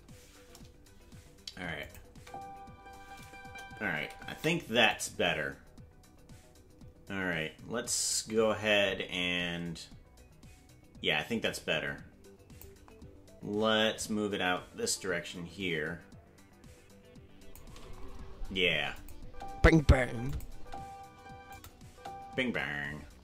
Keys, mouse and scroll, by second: 1.8 click, 2.1 space, 3.4 KP_0, 4.3 space, 4.9-12.6 drag, 13.9-17.6 shift+drag, 18.9 click, 19.2 space, 20.3 click, 20.3-22.5 typing, 21.5 click.